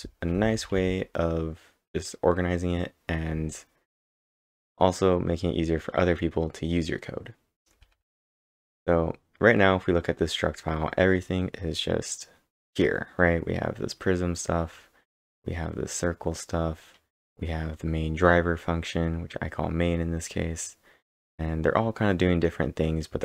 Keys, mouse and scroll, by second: 0.0-2.4 typing, 5.1 typing, 7.7 typing, 11.1 typing, 11.2 scroll up 3, 12.7-13.6 scroll up 5, 14.7 scroll down 1, 14.9-15.4 scroll down 1, 15.5-16.2 scroll down 3, 16.6-18.0 scroll down 4, 21.1 scroll up 1, 21.1 scroll down 1, 21.2-21.8 scroll up 7.